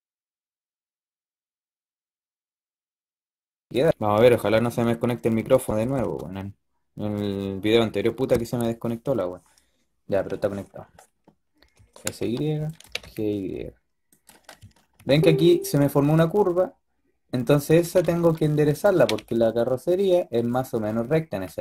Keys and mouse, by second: 0.9 g, 11.6 s, 12.7 g, 17.6 s, 18.8 g.